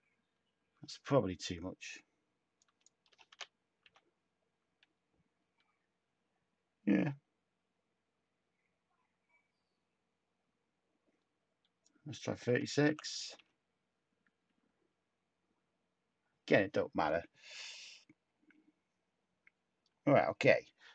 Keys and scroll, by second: 3.0-3.8 typing, 12.2-13.3 typing.